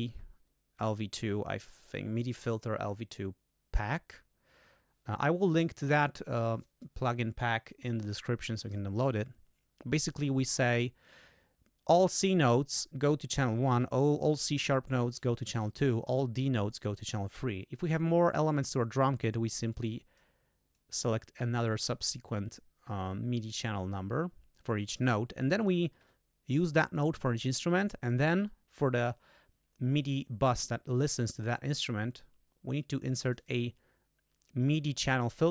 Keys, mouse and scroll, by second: 19.2-20.4 drag, 20.7-22.0 drag, 25.6 click, 26.6 click, 28.0 click, 33.2 click.